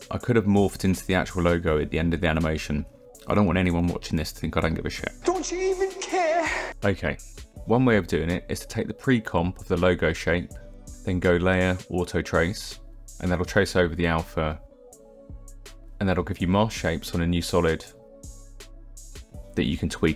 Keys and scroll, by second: 7.4 t, 15.1 t.